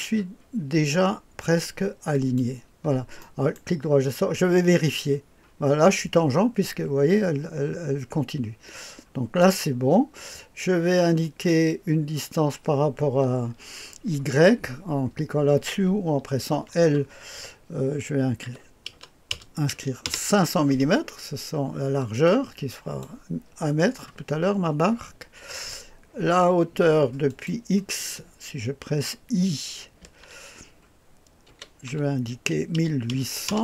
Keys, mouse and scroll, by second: 2.1 click, 3.2 right click, 4.9-10.0 drag, 11.2 click, 16.5 i, 18.4 KP_5, 18.8 KP_0, 19.3 KP_0, 20.0 Return, 22.2-23.0 drag, 27.2 click, 30.0 i, 31.4 KP_1, 31.8 KP_8, 32.7 KP_0, 33.0 KP_0, 33.4 Return.